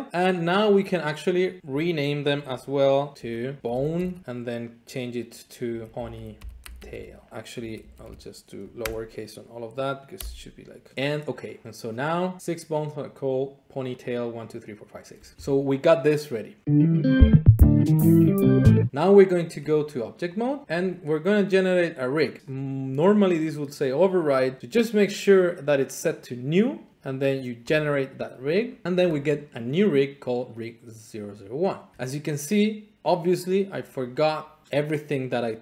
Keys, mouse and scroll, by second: 0.7 click, 3.1 ctrl+F3, 3.6 click, 3.6-4.7 typing, 5.9-7.2 typing, 7.5 Left, 7.7 Left, 8.0 Left, 8.8 BackSpace, 10.1 t, 11.3 click, 12.4 click, 13.3-15.3 drag, 18.9-20.4 Tab, 20.4 click, 20.6 click, 22.4 click, 22.5 click, 24.3 click, 25.1 click, 27.7 click, 28.6-29.7 scroll, 33.0 middle click, 34.2 click.